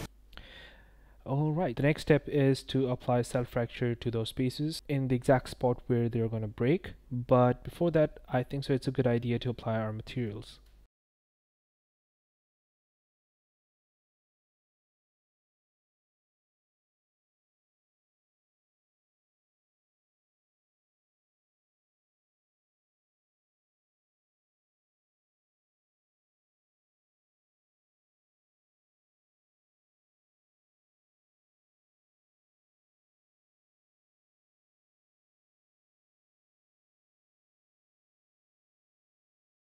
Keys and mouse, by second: 1.6-2.2 drag, 10.8 click, 11.4 click, 11.7 shift+click, 12.5 a, 12.8 ctrl+l, 13.7 click, 13.9 Tab, 14.0 click, 14.0 3, 14.5 shift+click, 14.7 click, 15.0 click, 15.8 click, 16.2 Tab, 16.4 click, 16.5 click, 16.8 click, 16.9 click, 17.2 n, 17.3 shift+click, 17.6 shift+click, 18.5 shift+click, 18.9 o, 19.1 click, 19.7 click, 20.2 click, 20.5 click, 20.6 ctrl+z, 21.2 click, 21.9 click, 22.8 click, 23.2 click, 23.5 click, 23.6 BackSpace, 23.7 BackSpace, 24.6 shift+click, 25.8 click, 25.9 shift+a, 27.0 click, 28.1 Tab, 28.6 shift+click, 29.1 ctrl+z, 29.1 c, 29.6 click, 30.0 click, 30.4 click, 30.7 click, 31.4 shift+click, 32.1 click, 32.4 Tab, 32.4 click, 32.7 click, 33.3 shift+click, 34.1-35.3 drag, 34.9 ctrl+Left, 35.5 click, 35.6 shift+a, 36.3 shift+click, 36.7 click, 37.1 ctrl+l, 38.0-39.3 typing, 39.5 ctrl+p.